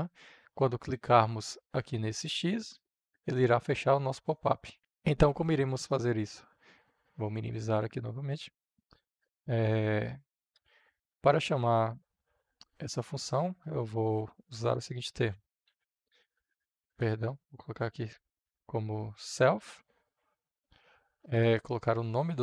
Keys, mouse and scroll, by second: 14.7-16.2 typing, 16.5 Return, 17.4-19.0 typing, 19.3 Return, 20.9 Right.